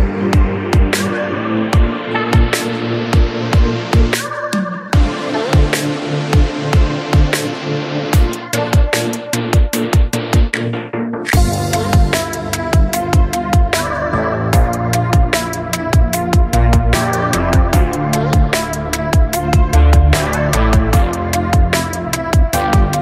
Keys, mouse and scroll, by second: 0.4 alt+z, 0.6 click, 0.8-1.7 scroll down 4, 1.7 shift+a, 2.9 r, 4.7 g, 9.6 click, 10.2 click, 10.5-11.0 scroll up 1, 11.0 shift+middle drag, 11.2-11.8 scroll up 1, 11.8 h, 12.8 ctrl+z, 13.1 click, 13.3-13.6 scroll down 5, 13.6 shift+middle drag, 13.9 shift+click, 14.3 ctrl+s, 14.7 drag, 15.6-16.9 drag, 18.3 drag, 18.9-20.5 drag, 20.5 g.